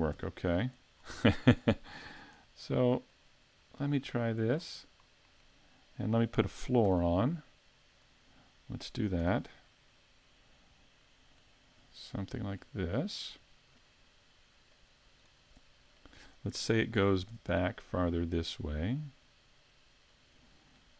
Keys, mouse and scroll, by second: 0.1 x, 1.0-1.6 scroll up 3, 1.6 right click, 2.1 shift+right click, 3.1 click, 4.7 scroll down 2, 5.0 middle click, 5.8-6.4 scroll down 2, 6.2 shift+middle click, 6.9 shift+a, 9.2 s, 11.5 click, 12.6 middle click, 14.7 click, 16.0 middle click, 17.0 s, 20.3 click.